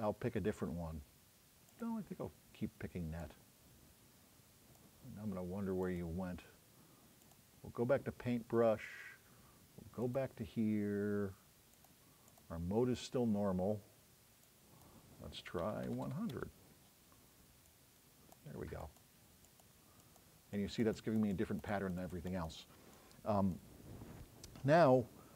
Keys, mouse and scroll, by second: 2.7 scroll up 2.